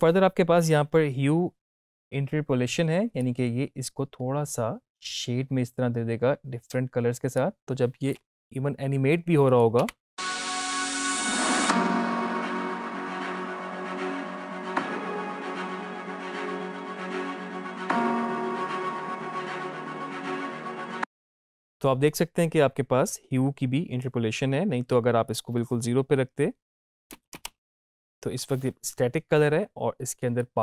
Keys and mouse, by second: 3.1-9.4 drag, 20.5 space, 21.5-23.6 drag, 25.2 click, 30.4-30.6 drag.